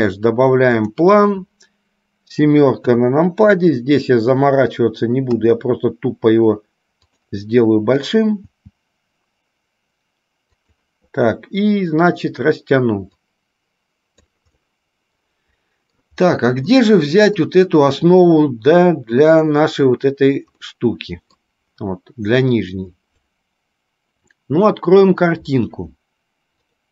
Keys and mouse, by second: 13.5 click, 14.8-16.2 middle drag, 17.0-17.8 middle drag, 19.5 click, 20.8 middle click.